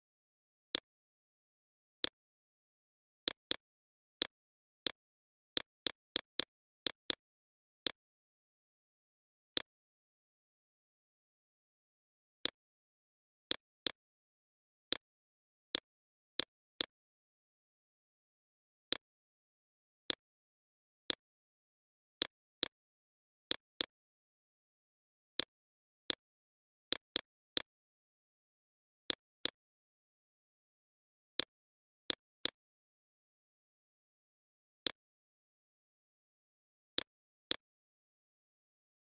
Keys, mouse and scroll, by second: 10.1-22.7 alt+shift+drag, 24.0-28.0 drag, 28.0 right click, 28.5 click, 34.2 Left, 34.5 Up, 34.8 Right, 35.3-39.0 drag.